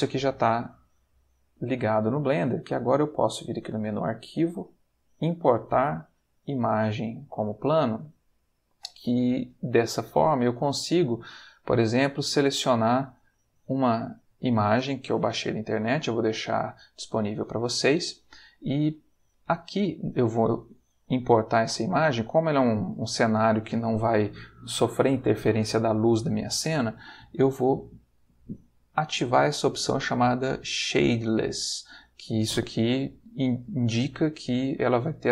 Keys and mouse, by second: 3.3 click, 6.9 click, 9.4 click, 10.3 click, 13.3 click, 34.0 click.